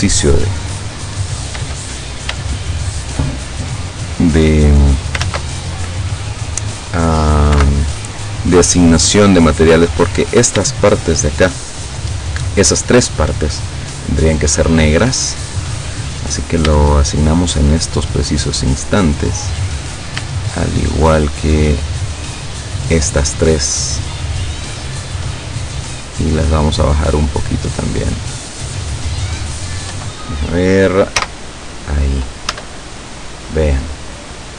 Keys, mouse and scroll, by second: 0.3 shift+right click, 1.1 shift+right click, 2.8 shift+right click, 3.6-5.4 shift+drag, 5.3 ctrl+z, 7.6 o, 8.5-10.4 drag, 11.2 shift+right click, 14.0 click, 15.0 click, 16.8 shift+middle click, 18.6 right click, 19.3 right click, 21.0 shift+right click, 24.8 click, 25.3 click, 26.6-28.5 drag, 30.0 KP_7, 31.2 z, 32.6 Tab, 33.2-33.6 scroll down 2.